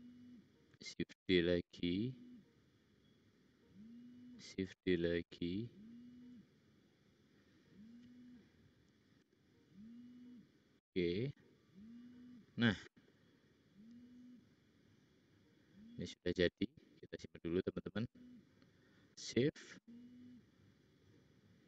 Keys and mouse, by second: 1.0 shift+d, 4.8 shift+d, 9.4 g.